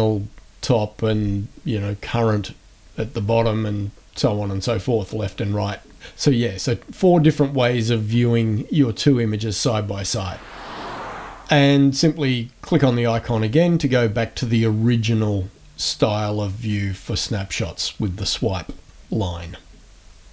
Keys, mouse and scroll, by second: 3.8 click, 5.2 click, 12.7 click, 16.2-17.8 drag.